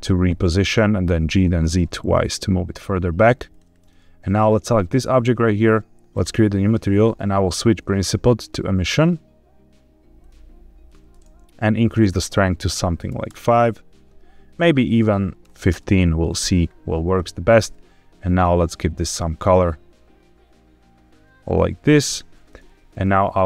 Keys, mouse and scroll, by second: 0.0-1.4 typing, 0.4 Escape, 3.4 click, 4.3 click, 6.0 click, 7.2-8.0 drag, 9.9 click, 11.8-13.2 drag, 14.4-15.6 drag, 17.0 click, 22.8 click.